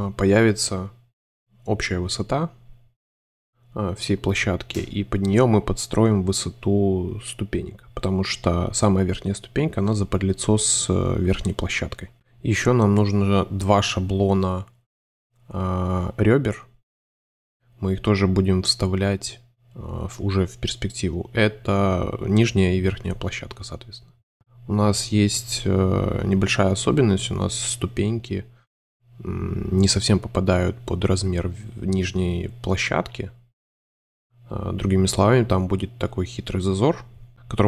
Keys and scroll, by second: 1.3 shift+c, 4.8 alt+shift+super+v, 5.4 v, 7.7 Page_Up, 7.9 space, 11.8 shift+m, 13.8 shift+c, 15.4 alt+super+d, 15.5 super+c, 16.5 a, 18.0 super+d, 21.4 shift+m, 22.3 shift+c, 23.1 v, 23.6 shift+v, 24.8 shift+c, 27.5 BackSpace, 27.6 Return, 28.6 super+z, 30.2 super+5, 30.2 super+Page_Up, 30.7 super+c, 37.3 /.